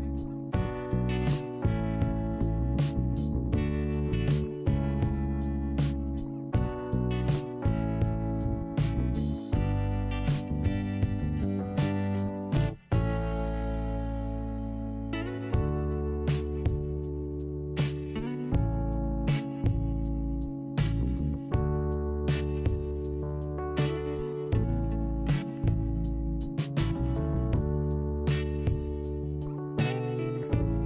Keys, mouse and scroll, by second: 0.4 click, 5.7 scroll down 1, 7.2 click, 8.6 scroll up 1, 11.1 click, 12.9 click, 14.5 click, 14.5 click, 14.9-15.2 scroll down 1, 16.5-17.6 scroll up 1, 19.0 click, 20.3 scroll down 1, 21.2 scroll up 1, 22.8 click, 27.2 scroll up 2, 28.4 click.